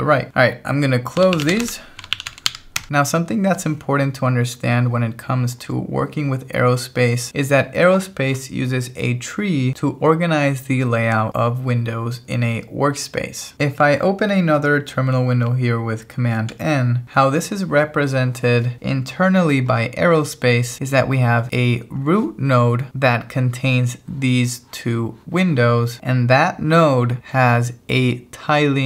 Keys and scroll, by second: 0.9-3.0 typing, 7.3 alt+1, 16.5 super+n.